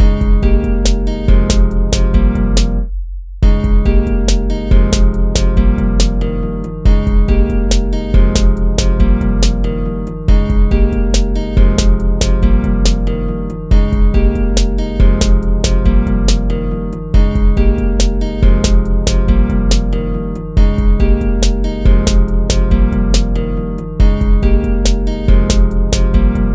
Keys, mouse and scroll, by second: 0.0 ctrl+z, 6.0 ctrl+z, 13.5 ctrl+z, 14.3 ctrl+z, 16.0 ctrl+z, 18.9 ctrl+z, 20.5 ctrl+-, 22.4 ctrl+z.